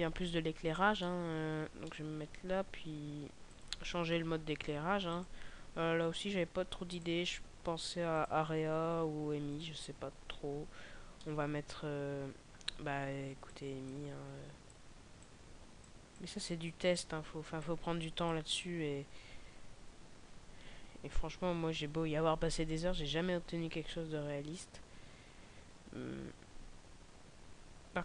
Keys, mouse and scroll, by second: 0.2 scroll down 2, 0.9 middle click, 1.7 middle click, 3.5 right click, 5.1 click, 11.0 middle click, 13.4 click, 14.7 click, 27.9 Escape.